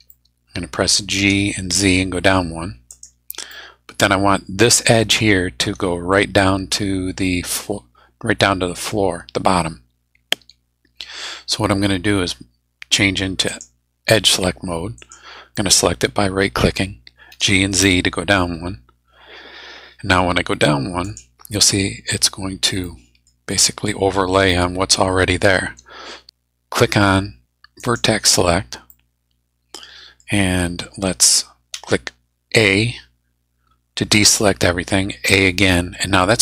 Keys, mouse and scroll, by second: 0.0 click, 1.2 g, 1.7 z, 2.9 click, 3.5 click, 13.5 click, 15.0 click, 15.5 middle click, 16.3 scroll up 2, 17.3 g, 17.8 z, 21.0 click, 22.8 middle click, 23.6 scroll up 1, 24.4-25.8 middle drag, 25.8-26.1 scroll down 1, 27.8 click, 28.9-30.3 middle drag, 31.7 a, 35.3 a.